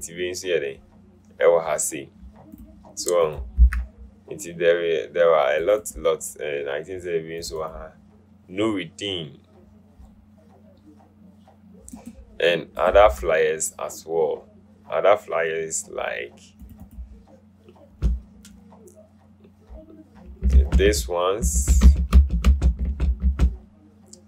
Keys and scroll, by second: 3.9 BackSpace, 13.3 BackSpace, 20.9 Right, 22.0 Right, 22.2 Right, 22.6 Right, 22.9 Right, 23.3 Right.